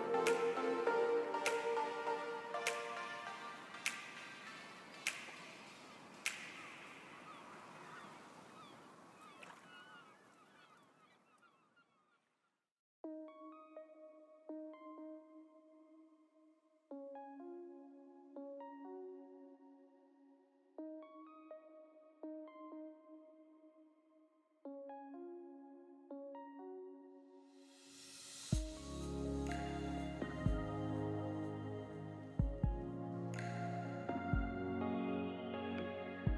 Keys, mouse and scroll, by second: 2.8 click, 3.8 middle click, 4.5 3, 4.7 click, 5.0 shift+click, 6.0 s, 7.0 middle click, 7.8 1, 8.0 click, 9.7 scroll down 2, 10.0 alt+a, 10.1 Tab, 10.3 middle click, 11.3 click, 12.7 middle click, 13.6-14.0 scroll up 3, 13.9 Tab, 14.0 middle click, 15.3 click, 15.8 shift+click, 18.8 s, 20.2 click, 20.6 shift+click, 23.2 s, 24.0 alt+a, 24.1 Tab, 24.3-24.8 scroll down 3, 24.5 middle click, 25.5 scroll down 1, 25.7 scroll up 4, 25.8-26.2 scroll down 10, 26.4 scroll up 2, 26.6 shift+middle click, 27.1 click, 27.8 middle click, 30.4 click, 32.2 KP_Decimal, 32.6-33.3 scroll down 6, 32.8 middle click, 33.3 shift+middle click, 33.8 s, 35.0 g, 35.7 middle click.